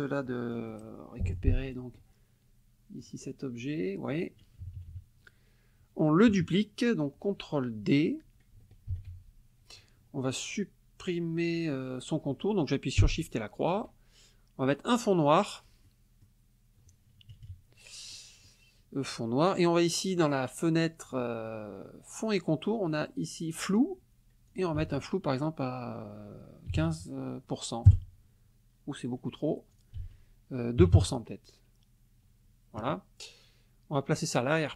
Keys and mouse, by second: 0.3 middle click, 1.2 middle click, 1.7 middle click, 3.0 click, 4.6 KP_Subtract, 6.3 KP_Subtract, 8.9 ctrl+d, 13.2 shift+click, 14.9 click, 15.8 click, 17.3 KP_Subtract, 18.1 click, 21.1 click, 24.5 ctrl+click, 24.8 ctrl+a, 26.7 KP_1, 26.8 KP_5, 27.9 KP_Enter, 29.8 ctrl+click, 30.0 ctrl+a, 30.8 KP_2, 30.9 Return, 34.1 click.